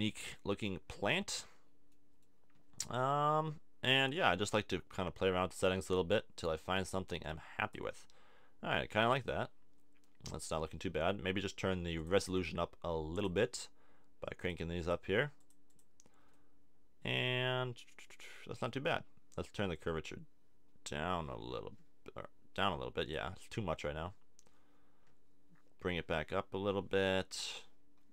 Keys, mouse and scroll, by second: 1.1-4.5 middle drag, 8.0-10.0 middle drag, 12.0-13.9 middle drag, 14.4-21.6 middle drag, 23.5-27.6 middle drag.